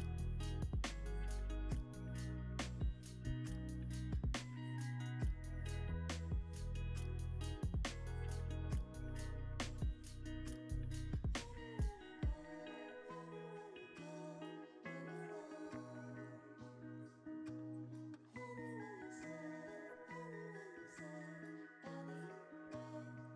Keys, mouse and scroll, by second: 5.2 Tab, 5.7 middle click, 7.4 ctrl+r, 7.4-9.1 drag, 8.4 ctrl+r, 10.7 ctrl+r, 14.3 double click, 14.9 middle click, 16.2 scroll up 1, 22.5-23.3 super+drag, 23.1-23.3 typing.